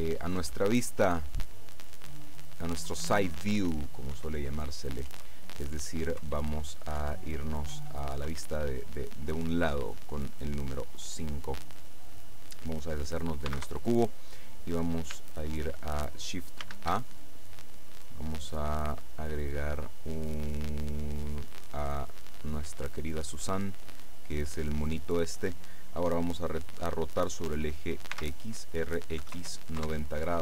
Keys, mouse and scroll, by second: 0.5 KP_6, 2.8 KP_5, 3.5 KP_6, 4.2 KP_5, 5.2 KP_6, 6.3 KP_4, 7.1 KP_5, 7.8 KP_4, 8.4 KP_5, 13.6 x, 13.7 KP_Enter, 16.7 shift+a, 21.6 click, 23.1-25.0 drag, 27.6 r, 28.2 x, 29.3 KP_9, 29.4 KP_0, 29.8 KP_Enter.